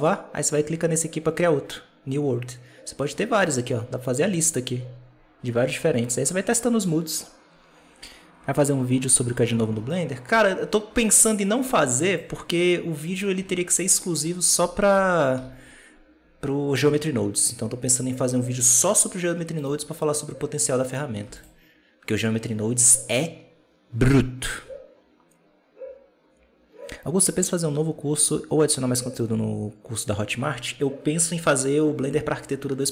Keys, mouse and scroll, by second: 3.3-6.3 drag, 9.5-10.3 scroll down 7, 10.3-10.9 scroll up 1, 10.9 right click, 11.4-12.0 scroll up 1, 12.0-13.0 drag, 13.0-13.3 scroll down 1, 13.3 alt+a, 13.5 scroll up 1, 13.7-15.2 scroll down 6, 15.2 Home, 19.5 right click, 20.7 right click, 21.1 x, 22.8-25.7 right drag.